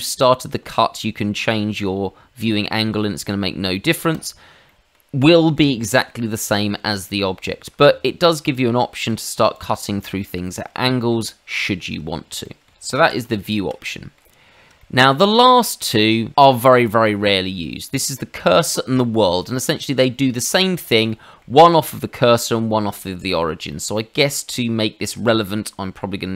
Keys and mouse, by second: 0.6 middle click, 4.1 click, 4.6 middle click, 5.3 shift+middle click, 7.4 shift+middle click, 7.8 middle click, 8.5 click, 9.3 click, 9.5 click, 10.0 middle click, 10.8 shift+middle click, 11.7 shift+middle click, 12.4 middle click, 13.0 ctrl+z, 13.2 ctrl+z, 13.8 middle click, 14.8 shift+middle click, 16.6 click, 20.3 Escape, 21.0 middle click, 22.9 middle click, 23.7 shift+middle click, 24.5 middle click, 25.1 shift+middle click.